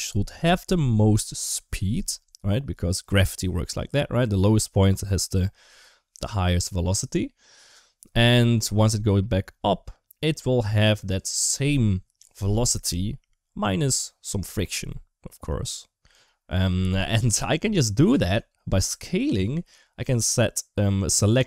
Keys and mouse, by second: 20.0 click, 21.0-21.4 drag.